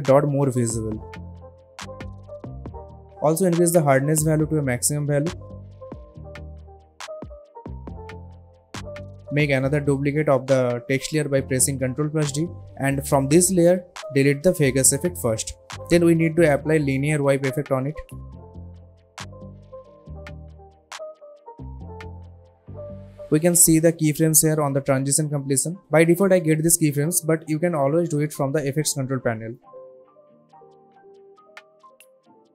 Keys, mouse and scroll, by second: 0.4-1.7 drag, 6.5 Return, 8.7 alt+scroll down 1, 9.3 click, 11.1 click, 11.7 ctrl+d, 12.6 click, 15.2 Delete, 16.5 click, 17.1-18.2 typing, 19.5 click, 22.8 u, 23.9-24.7 drag.